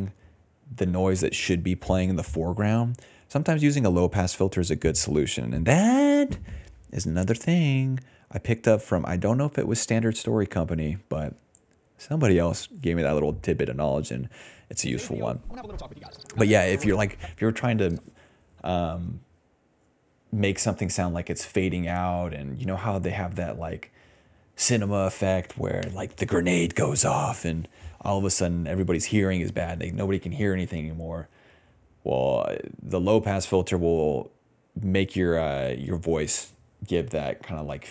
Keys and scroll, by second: 3.4-8.8 typing, 10.1-12.7 typing, 13.1 Return, 14.6 ctrl+s, 14.7 space, 15.6 d, 16.5 d, 17.2 space.